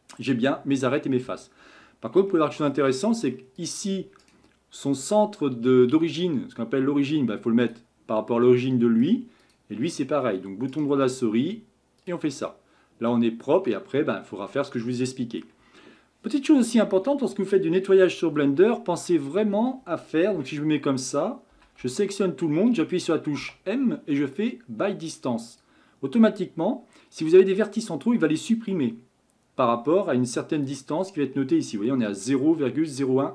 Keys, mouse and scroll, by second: 2.3-3.3 shift+middle drag, 3.3 scroll up 1, 3.6 click, 4.2-8.1 right drag, 8.1-9.4 middle drag, 9.4 click, 10.7-12.5 right drag, 12.5-14.5 middle drag, 14.5-14.9 scroll down 1, 14.9-18.0 middle drag, 20.3 Tab, 21.5 a, 21.8 a, 23.4 m, 27.6-30.6 middle drag, 30.6-33.3 drag.